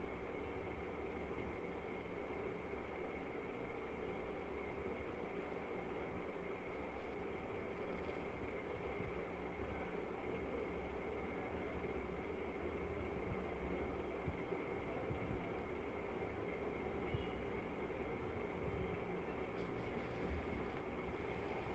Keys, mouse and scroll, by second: 2.2 click, 4.0 right click, 6.3 click, 8.5 click, 10.4 click, 14.7 click, 16.1 click, 18.0 click, 18.8 click, 20.8 right click.